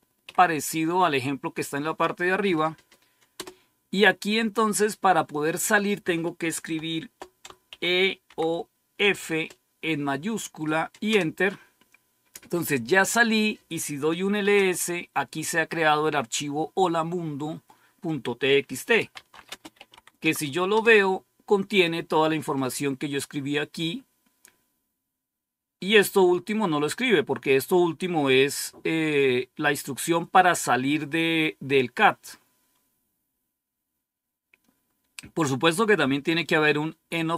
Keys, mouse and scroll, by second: 0.0-0.6 typing, 3.3 Return, 7.6-8.9 typing, 11.0 Return, 11.2 typing, 13.9-14.8 typing, 18.7-20.3 typing, 20.6 Return, 21.6 typing, 26.0 click.